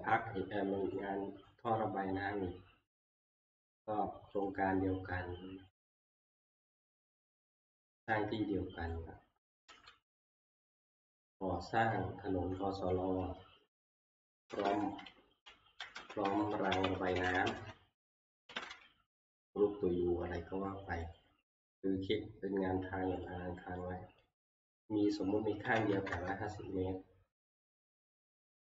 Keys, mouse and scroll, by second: 1.5 scroll, 2.4 middle click, 4.5 click, 6.2 ctrl+click, 6.4 ctrl+c, 7.4 click, 9.6 click, 9.7 ctrl+v, 14.4-19.2 typing, 21.2 click, 23.3 click, 24.0 click, 25.4-26.6 typing, 27.8-28.6 scroll.